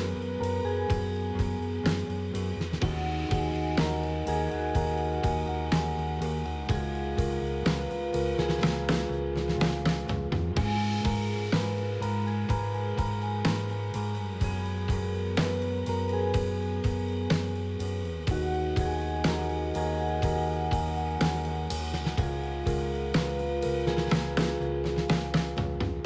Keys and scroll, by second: 14.6 KP_1, 16.9 e.